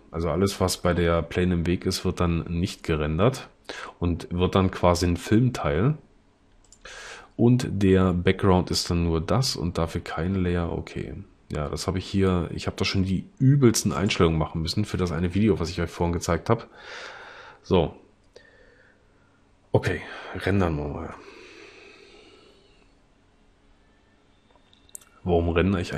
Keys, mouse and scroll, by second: 21.3 F12.